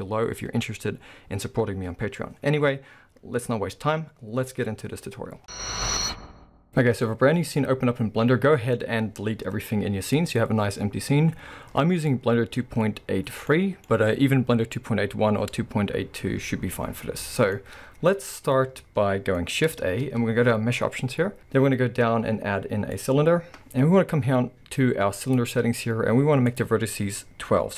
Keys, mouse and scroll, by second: 9.7-17.5 middle drag, 17.6-19.8 middle drag, 19.8 shift+a, 25.2 click, 26.5-27.7 drag.